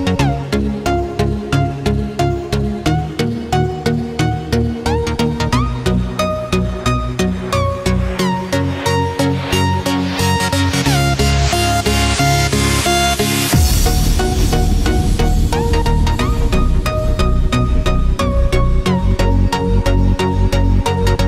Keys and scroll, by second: 0.2 ctrl+-, 1.8 ctrl+=, 19.5 ctrl+z.